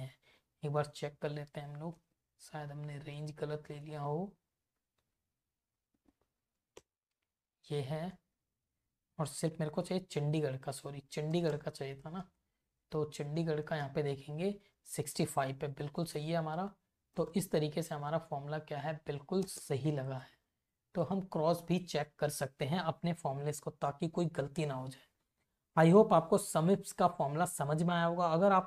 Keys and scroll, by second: 0.2 Up, 0.5 Left, 0.8 Up, 2.0 ctrl+c, 2.3 Left, 2.7 Up, 4.2 Down, 6.0 Up, 6.4 v, 6.8 Return, 7.7 Up, 8.0 Left, 10.2 alt+Down, 11.3 space, 11.6 Return, 12.5 Right, 13.1 Left, 14.5 Up, 15.9 Down, 17.0 Up, 17.4 space, 17.5 Return, 17.9 Right, 19.5 space, 20.0 Right, 26.1 Up.